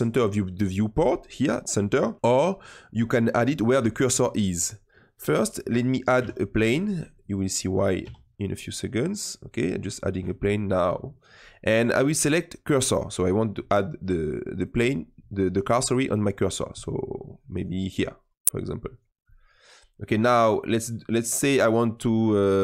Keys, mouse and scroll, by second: 5.1-6.1 middle drag, 6.1 shift+a, 7.9 s, 12.8 click, 14.4-16.7 drag, 16.7-17.4 middle drag, 17.4 click, 18.8-19.2 drag, 19.2-20.4 middle drag, 20.4-22.6 drag.